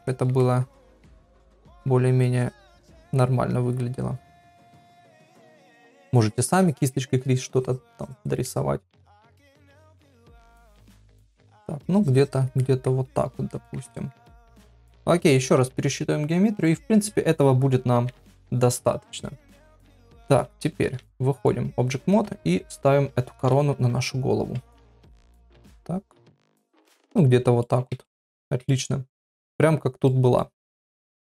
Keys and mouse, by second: 0.1 shift+middle click, 0.4 middle click, 1.4 shift+middle click, 2.3 click, 3.2 middle click, 4.3 click, 4.9 shift+middle click, 6.1 click, 7.6 click, 8.5 middle click, 9.7 click, 10.4 click, 11.0 middle click, 11.9 click, 12.6 middle click, 13.5 middle click, 13.9 ctrl+middle click, 14.3 middle click, 16.7 ctrl+r, 18.2 KP_Divide, 20.8 ctrl+Tab, 22.2 KP_1, 23.4 g, 27.1 middle click, 28.0 middle click, 29.1 middle click, 30.0 middle click, 30.7 click, 31.0 shift+s.